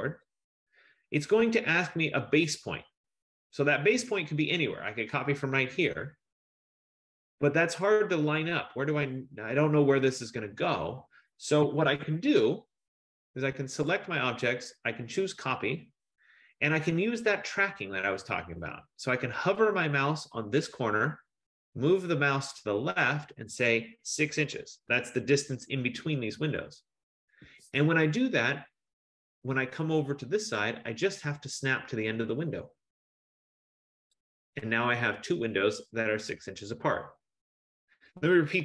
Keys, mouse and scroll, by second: 0.3 click, 5.0 click, 7.5-10.1 drag, 11.9 Escape, 13.1 click, 14.1 click, 15.8 click, 17.8-18.9 scroll, 24.5 6, 26.4 shift+', 27.5 Return, 34.3 click, 36.2 Return.